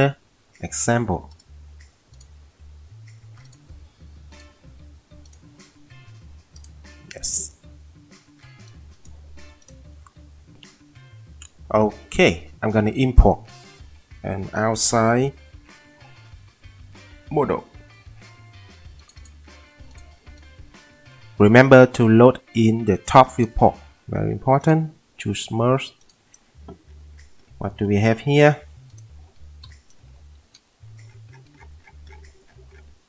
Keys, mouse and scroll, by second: 24.9 click, 29.6 p, 30.4 alt+w.